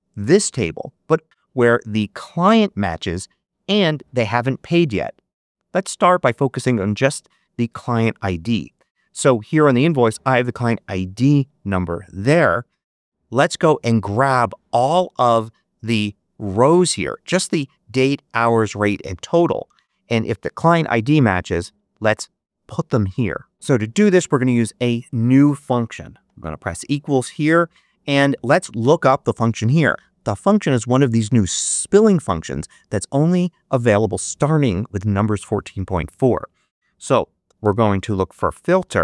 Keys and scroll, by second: 26.1 =, 37.1-38.7 typing.